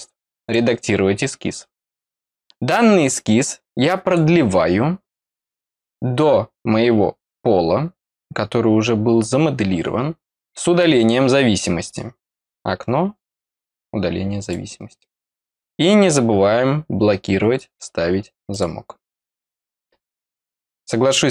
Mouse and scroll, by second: 0.3 click, 1.6 middle click, 2.4-4.1 drag, 12.5 click, 14.3 click, 20.7 click.